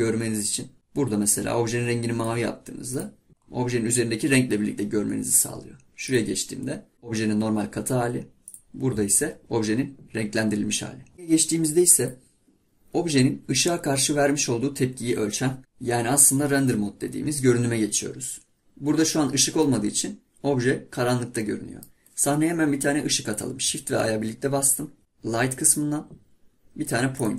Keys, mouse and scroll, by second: 2.9 click, 3.3 scroll down 1, 3.5-5.4 scroll up 1, 6.3 click, 8.6 click, 12.4 click, 18.4-19.0 scroll down 1, 19.0-19.3 scroll up 1, 19.3-19.7 scroll down 1, 19.7-22.7 middle drag, 24.1 shift+a.